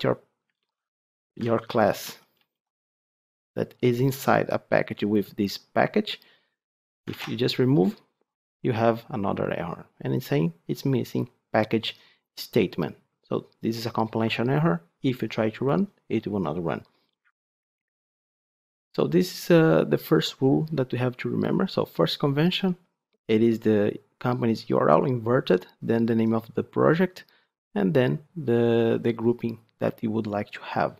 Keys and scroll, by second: 0.4 ctrl+z, 1.2 ctrl+z, 7.0 ctrl+x, 17.7 ctrl+z.